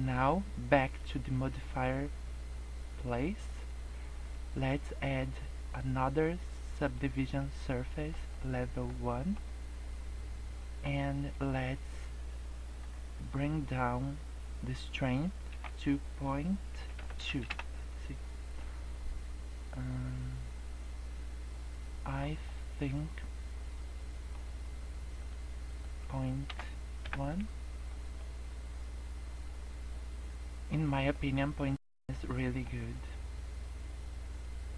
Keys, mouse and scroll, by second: 1.4 click, 4.5 click, 7.3 middle click, 8.2 scroll up 1, 8.5 middle click, 9.0 middle click, 10.2 scroll down 1, 11.4 click, 18.5 middle click, 22.3 scroll down 1, 22.4 middle click, 25.1 click, 28.1 middle click, 30.8 scroll up 2, 31.0 middle click, 31.4 scroll down 3, 31.6 middle click, 31.9-32.3 scroll up 2, 32.3 middle click, 32.8 scroll down 2, 33.1 middle click.